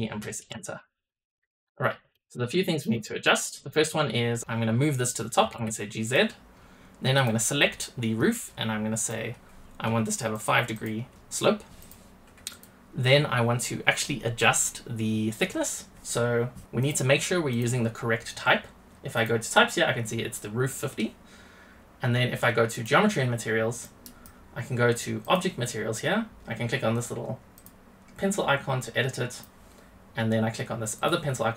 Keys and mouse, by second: 1.0 middle drag, 1.2 drag, 1.4 middle click, 1.5 click, 2.1 drag, 2.6 shift+middle drag, 3.0 drag, 3.6 click, 3.9 click, 5.3 g, 7.1 click, 8.9-10.3 drag, 10.7 click, 11.7 click, 12.4 click, 16.7 drag, 17.4 click, 19.1 click, 22.6 click, 23.8 click, 25.1 click, 27.5 click, 28.7 click, 31.0-31.5 drag.